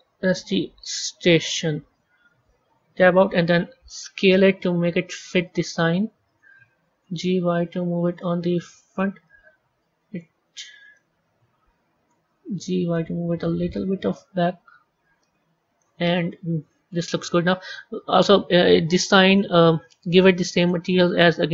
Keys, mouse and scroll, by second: 0.0-1.4 typing, 2.5 Tab, 3.9 s, 6.9 g, 9.2-10.2 middle drag, 10.2-10.8 scroll down 2, 10.8-12.4 middle drag, 12.4 g, 15.9 middle click, 16.7 scroll up 2, 17.4 click, 19.1 click, 20.5-21.5 drag.